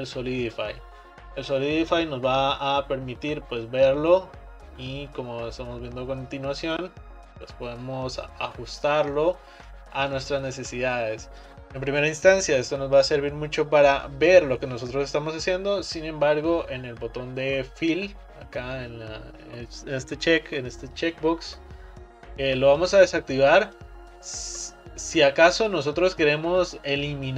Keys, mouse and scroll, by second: 0.0-1.2 drag, 1.2-2.1 scroll down 1, 2.1-5.2 drag, 9.4 scroll up 2, 9.9-11.6 middle drag, 11.6 click, 22.9 click, 23.9-26.9 middle drag.